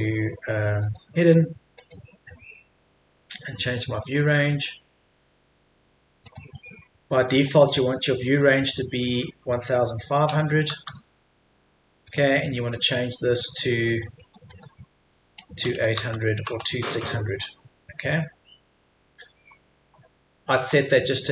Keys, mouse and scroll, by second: 2.3-4.3 scroll up 1, 4.3-10.1 drag, 10.1 KP_1, 12.1 click, 15.5 KP_2, 19.5-19.9 scroll up 1, 19.9 middle click, 20.7-21.3 scroll up 1.